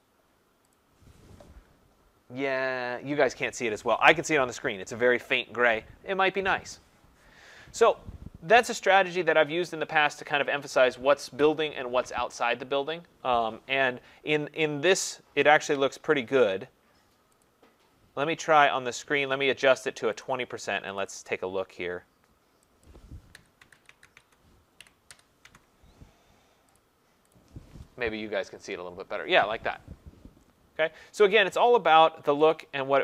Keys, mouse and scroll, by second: 0.9 click, 17.4 click, 20.2 click, 21.0 click, 21.2 click, 22.8 click, 23.4-25.4 typing, 23.6 Tab, 23.9 Tab, 26.4 typing, 26.8 click, 27.3 click, 32.5 click.